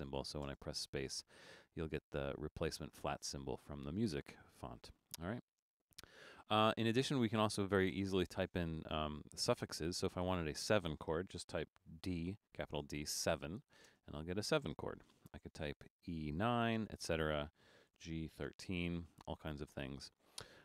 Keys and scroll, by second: 0.6 space, 12.1 shift+d, 13.1-13.9 typing, 16.0-19.0 typing.